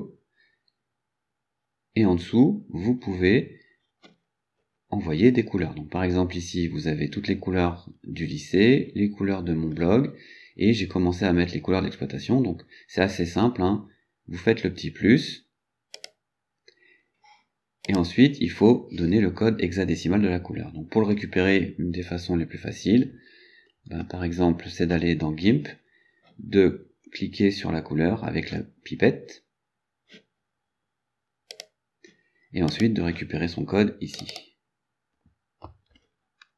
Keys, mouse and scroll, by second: 1.7 scroll down 2, 2.4-3.3 scroll down 4, 3.8-4.1 scroll down 2, 8.6-8.9 scroll down 2, 9.8 scroll down 1, 16.0 click, 17.9 click, 23.9 Tab, 31.6 click, 32.7 click, 34.2 click, 35.7 ctrl+c.